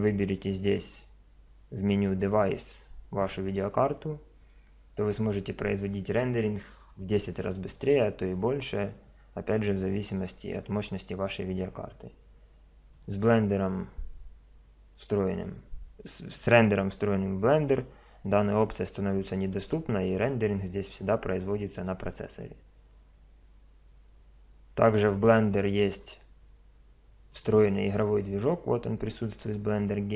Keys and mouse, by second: 2.3 click, 12.9 click, 27.3 click.